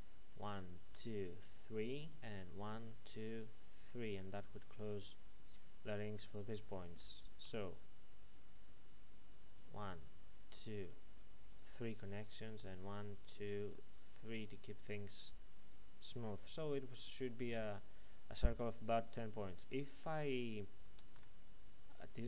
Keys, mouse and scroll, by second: 7.4-7.9 typing, 9.0-14.5 typing, 9.4 click, 10.2 click, 11.2 click, 12.5 click, 13.1 click, 14.1 click, 16.6 typing, 20.9 ctrl+Num_Lock, 21.7 click.